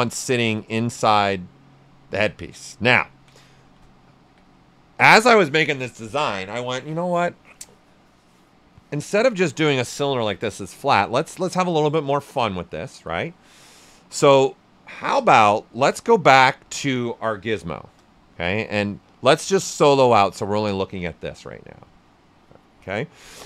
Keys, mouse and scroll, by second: 0.9-3.1 drag, 3.1 ctrl+right click, 3.6 shift+f, 3.8 shift+right click, 4.2 q, 4.5-15.3 right drag, 15.3 w, 16.1 right click, 17.7 shift+f, 18.2 right click, 19.5 click, 20.0 alt+right click, 20.7 ctrl+alt+right click.